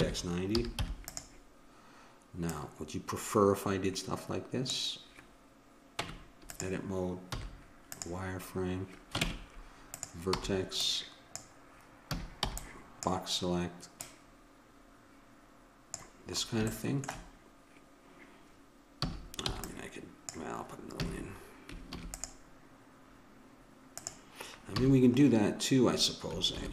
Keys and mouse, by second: 2.5-4.3 drag, 5.9 Tab, 7.3 z, 9.2 ctrl+Tab, 10.4 b, 12.1 a, 12.8 b, 14.0-15.6 drag, 16.7 click, 19.0 a, 19.5 b, 20.9 a, 21.9 ctrl+r, 24.8 a, 26.5 ctrl+r.